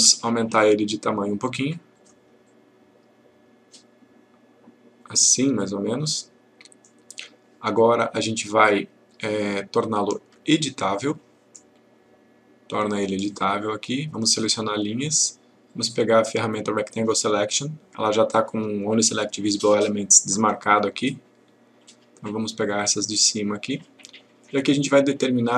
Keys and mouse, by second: 1.9 click, 13.2 click, 14.9 click, 22.2-23.2 click, 24.7-25.5 click.